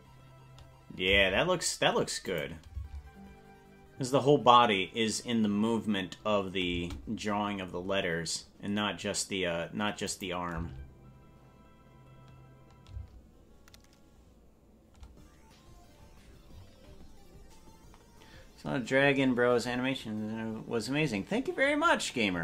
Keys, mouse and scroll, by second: 1.2 space, 2.3 click, 2.7 space, 6.8 space, 10.1 click, 10.5 space, 13.0 space.